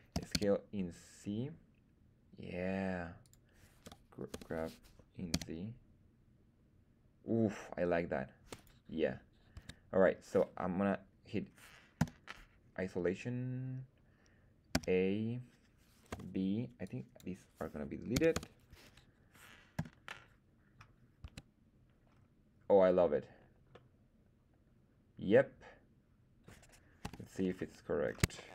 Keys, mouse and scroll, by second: 0.1 s, 0.2 z, 3.2 click, 3.8 f, 4.2 g, 5.2 z, 8.5 click, 9.5 Tab, 11.9 /, 14.7 a, 16.0 b, 19.2 x, 19.7 /, 21.1 Tab, 22.0-22.8 scroll down 1, 23.7-26.6 middle drag, 27.0 KP_1, 27.4-28.0 scroll up 1, 28.0 scroll up 3, 28.3 shift+middle click.